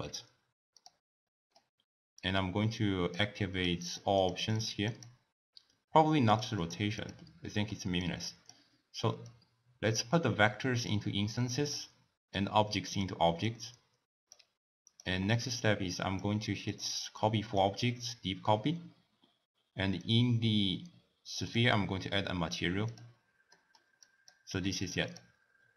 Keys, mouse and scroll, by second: 1.3-2.4 middle drag, 2.4 click, 3.7 click, 4.4 click, 5.1 click, 6.4 click, 6.8 click, 7.5-8.0 middle drag, 8.0 click, 9.2 drag, 11.3 click, 12.3-14.9 drag, 15.4 x, 15.5-16.7 drag, 17.2 click, 20.0 click, 21.4 click, 22.9 click, 23.5-24.0 middle drag, 24.0 click, 24.5 g, 25.1 click.